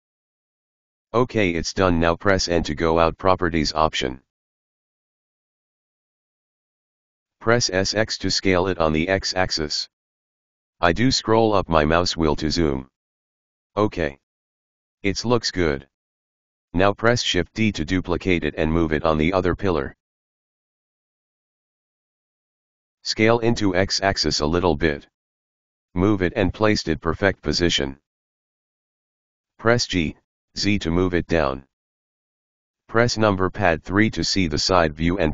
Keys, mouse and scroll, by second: 2.3 n, 2.7-7.0 middle drag, 7.2 s, 9.7 s, 11.4 KP_Decimal, 12.4-13.8 scroll up 4, 14.0-14.9 middle drag, 14.9-17.5 scroll down 6, 17.5 shift+d, 21.6 KP_Decimal, 22.3-23.5 middle drag, 23.5 5, 26.5 g, 27.1 g, 29.3 g, 32.3 KP_3, 34.3 h, 35.0-35.3 middle drag.